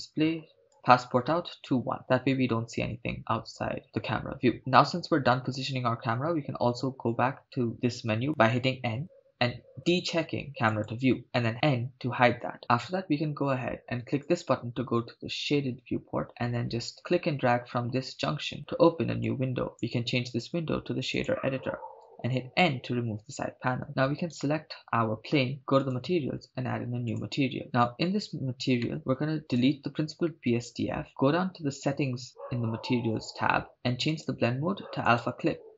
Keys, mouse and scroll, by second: 0.7-1.1 drag, 3.5-3.8 scroll up 1, 3.8-4.5 scroll down 1, 6.3 n, 10.7 click, 11.5 n, 14.8 click, 17.0-19.4 drag, 19.7-21.3 drag, 22.6 n, 23.4-23.8 scroll up 3, 23.9 scroll down 1, 24.4 right click, 25.8 click, 27.1 click, 28.8 middle click, 29.0-29.4 scroll up 6, 29.4 click, 30.8 x, 34.1-35.6 drag.